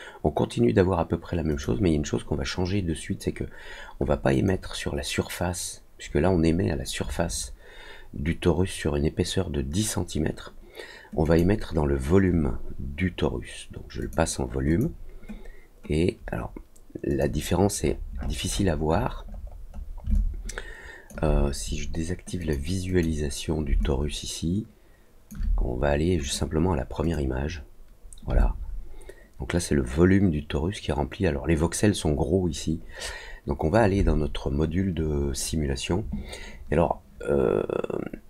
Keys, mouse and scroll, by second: 1.4 click, 4.3 click, 11.2 click, 13.9 click, 14.6 click, 17.0 click, 17.7 middle click, 17.8 scroll up 1, 18.1 scroll down 1, 18.2-18.5 scroll up 2, 18.5-18.9 scroll down 2, 18.9-19.5 scroll up 2, 19.6 middle click, 20.1 alt+click, 22.3 click, 22.8 click, 23.8-25.2 alt+drag, 26.2 click, 27.0 click, 28.3-33.7 alt+drag.